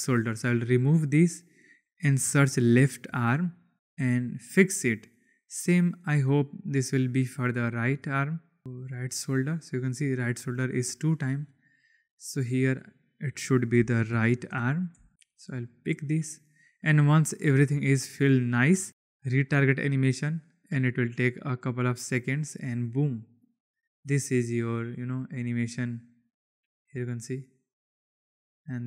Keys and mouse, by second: 0.4 click, 1.0-3.7 drag, 12.3 click, 12.8-15.9 drag, 19.5-21.5 drag, 23.0 click, 23.6 click.